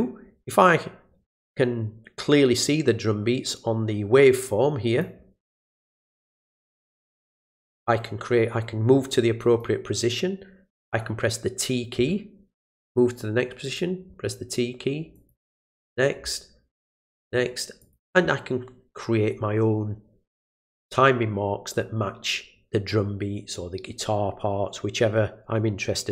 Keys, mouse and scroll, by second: 4.5 click, 6.5 click, 9.4 click, 13.6 click, 15.1 click, 16.9 click, 17.8 click.